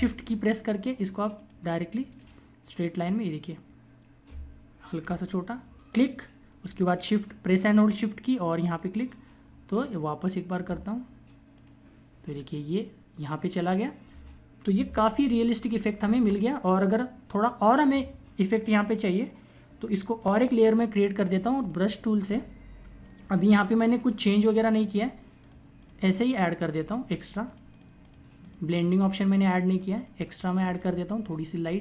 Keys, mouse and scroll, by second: 0.8 shift+click, 4.9 [, 5.7 click, 8.3 shift+click, 11.8 ctrl+=, 16.1 click, 22.5 ], 23.0 click.